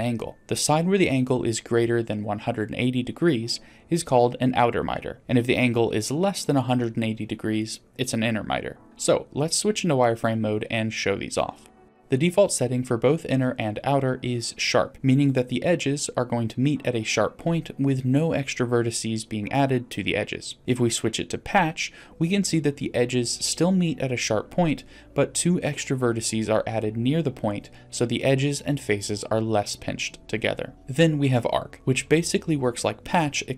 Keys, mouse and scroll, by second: 1.3-1.7 scroll up 1, 7.4 click, 8.8 click, 8.8 middle click, 9.0 scroll up 1, 10.0-10.3 shift+middle drag, 10.7 middle click, 11.3 shift+middle click, 15.7-20.6 drag, 21.3-21.8 scroll up 2, 22.0 shift+middle drag, 24.6-25.2 drag, 28.2-28.9 drag, 31.7 click.